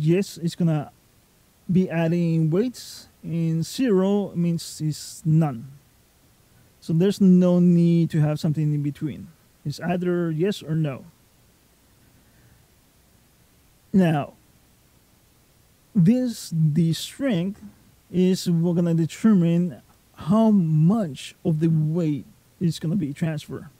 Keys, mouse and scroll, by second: 6.7 right click.